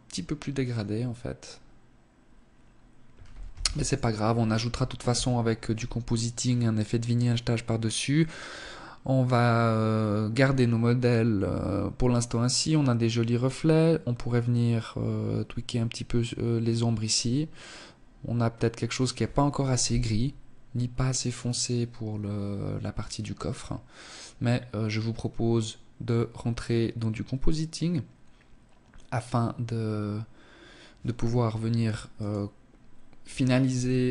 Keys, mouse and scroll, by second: 2.6 ctrl+s.